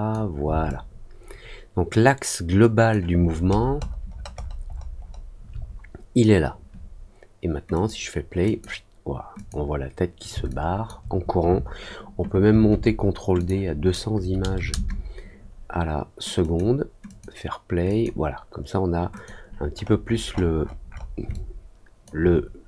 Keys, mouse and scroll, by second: 0.6-2.8 alt+drag, 3.1-5.1 alt+scroll up 7, 7.7 click, 8.4 click, 9.3 click, 10.4 alt+click, 13.3 click, 16.3 click, 17.0 click, 17.8 click, 19.1 click, 19.7 middle click, 20.0 middle click, 20.2 middle click, 20.5 middle click, 20.8 scroll up 1, 21.3 alt+click.